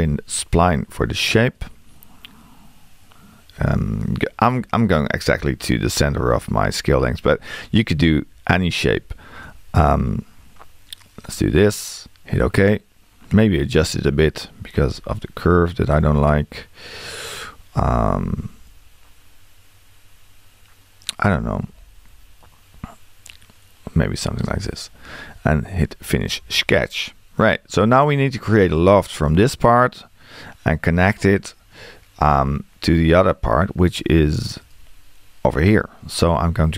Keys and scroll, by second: 13.9 Escape.